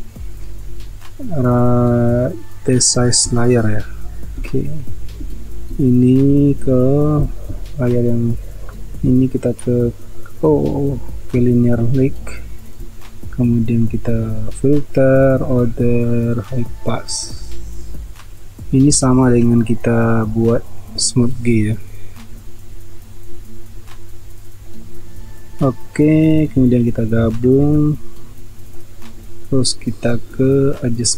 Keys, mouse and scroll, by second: 27.6 ctrl+e.